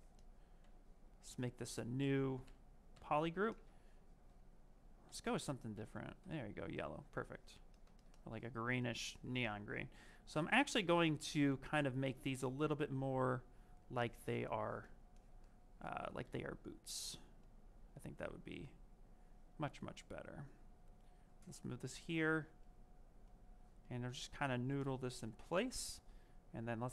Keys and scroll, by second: 5.6 ctrl+w, 7.3 ctrl+z.